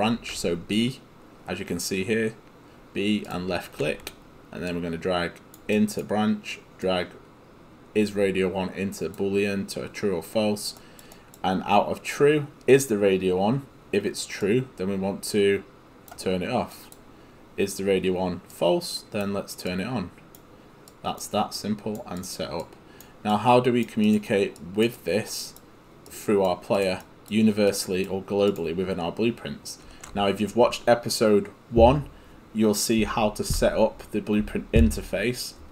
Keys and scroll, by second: 1.5 b.